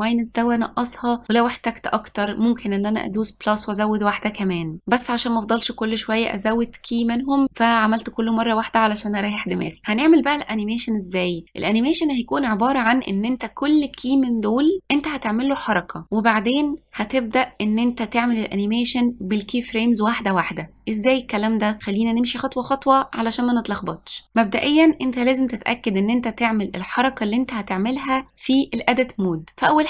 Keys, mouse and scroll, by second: 3.2 click, 7.2-9.8 scroll down 5.